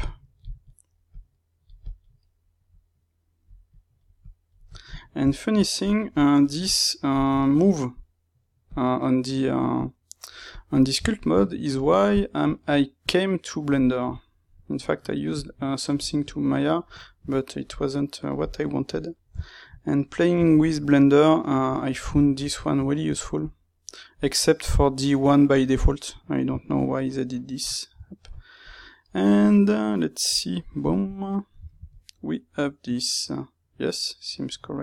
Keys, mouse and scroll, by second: 0.6 middle click, 1.0-2.1 drag, 2.1-3.6 middle drag, 3.6 click, 4.6-6.1 shift+middle drag, 6.1-7.3 drag, 7.3-8.6 ctrl+middle drag, 8.6-11.0 drag, 11.0-12.4 shift+middle drag, 12.4-13.7 drag, 13.7-15.0 middle drag, 15.0-17.0 drag, 17.0-18.9 ctrl+middle drag, 18.9 click, 19.3-23.3 shift+middle drag, 23.3-26.5 drag, 26.5-28.1 ctrl+middle drag, 28.1 alt+right click, 28.9-30.7 middle drag, 30.7 click, 30.8-34.8 middle drag.